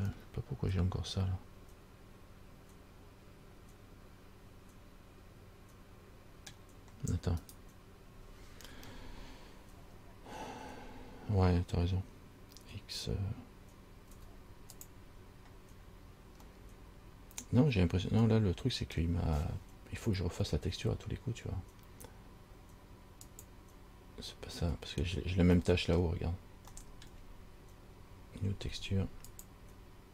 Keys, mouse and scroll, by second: 0.3 middle click, 7.6 right click, 9.9 scroll down 2, 14.3 x, 16.8 middle click, 23.4 click, 25.8 middle click, 27.0 middle click, 29.5 click.